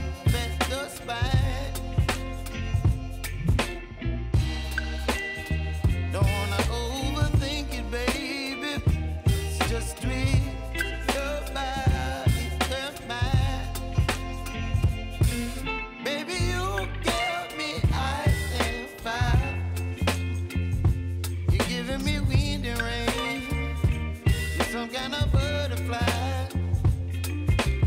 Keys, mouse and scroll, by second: 1.2 space, 3.0 click, 3.7 space, 5.3 click, 5.7 space, 8.5 space, 9.6-11.2 drag, 11.2-12.4 typing, 13.0 click, 13.5 k, 14.2-15.9 drag, 16.1 space, 20.2 space, 20.7 n, 20.9 space, 25.3 space, 26.2 click, 26.6 j, 27.1 click.